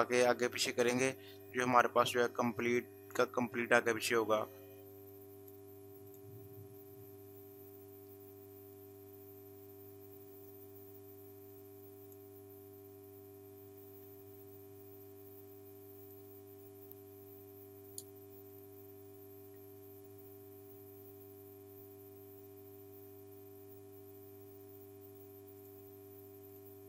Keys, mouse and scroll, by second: 11.6 click, 14.4 ctrl+space, 16.0 ctrl+alt+click, 18.5 ctrl+alt+click, 24.3 ctrl+alt+click, 24.8 ctrl+space, 25.6 ctrl+click, 26.5 ctrl+space.